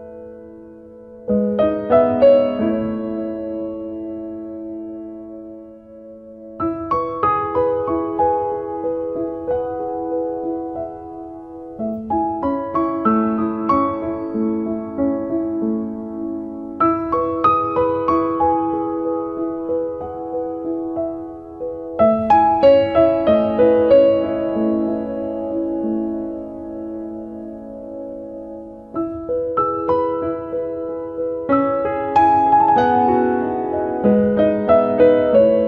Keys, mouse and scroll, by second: 0.2 middle click, 1.5 click, 2.4 click, 7.6 ctrl+right click, 8.6 shift+right click, 10.4 click, 10.8 click, 16.1 middle click, 17.6 shift+middle click, 18.7 ctrl+middle click, 20.4 ctrl+right click, 24.6 shift+middle click, 25.9 middle click, 27.9 click, 30.1 ctrl+right click, 30.9 shift+right click, 32.1 click, 33.0 ctrl+right click, 33.9 f, 34.1 click.